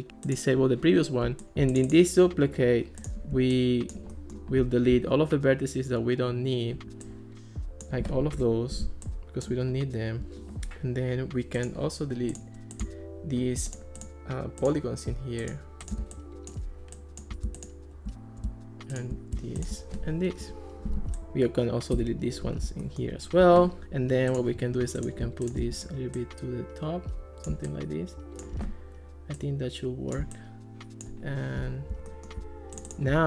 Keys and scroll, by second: 8.4 BackSpace, 20.5 BackSpace, 22.0 BackSpace.